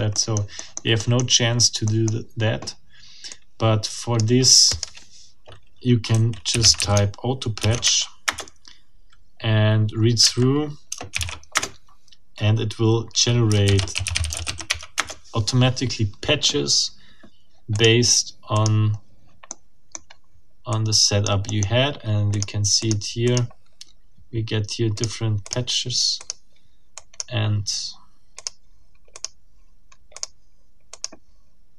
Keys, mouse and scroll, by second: 0.1 click, 1.1 middle click, 1.5 scroll down 1, 1.8 click, 1.9 middle click, 3.3-4.5 drag, 4.8 click, 5.9-7.6 typing, 7.8 shift+Tab, 8.3 shift+Return, 10.2 Up, 10.9 space, 11.1 0, 11.5 Return, 13.2-14.9 typing, 14.9 Return, 17.7 click, 18.5 click, 19.5 middle click, 19.9-20.6 scroll up 2, 20.7-21.4 drag, 21.5 middle click, 22.3 click, 22.8 click, 23.3 click, 23.6 scroll down 2, 24.3 scroll up 2, 24.9 click, 25.4 click, 26.2 click, 26.9 click, 27.8 scroll up 2, 28.3 click, 29.1 click, 30.1 click, 30.9 click.